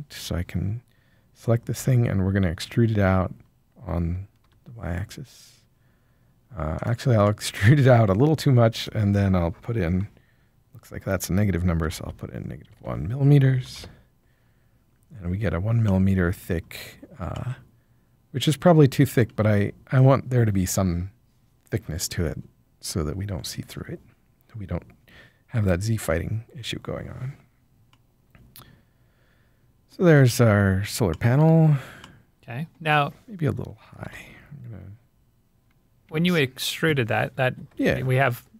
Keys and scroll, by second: 1.7 e, 4.4 y, 11.9-13.1 typing, 13.7 Return, 34.0 g, 36.0 Escape, 37.4 ctrl+l.